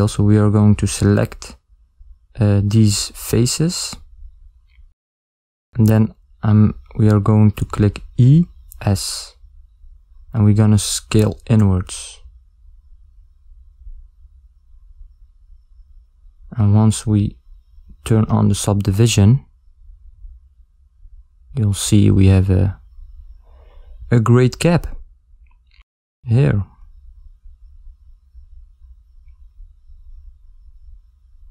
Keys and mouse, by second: 1.8 click, 3.4 ctrl+click, 3.7 click, 4.7 ctrl+middle click, 6.5 ctrl+middle click, 8.1 e, 12.8 Tab, 26.1 ctrl+middle click, 27.3 middle click.